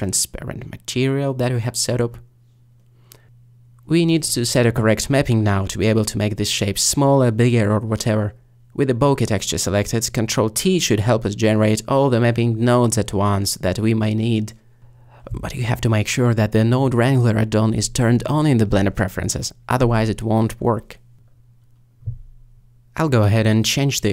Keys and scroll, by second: 11.2 ctrl+t, 14.2 g, 21.9 ctrl+z.